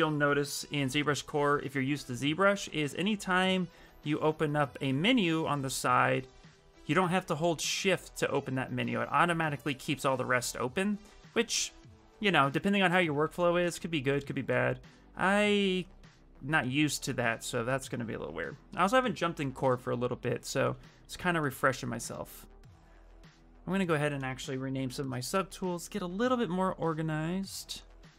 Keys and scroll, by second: 24.0-25.1 typing.